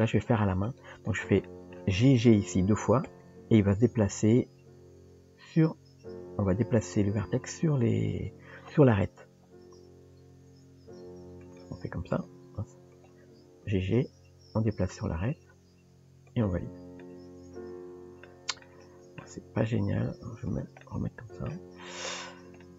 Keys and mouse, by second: 1.5 shift+middle click, 12.1 click, 12.9 click, 17.0-18.3 middle drag, 18.7 middle click, 20.9 middle click, 22.6 middle click.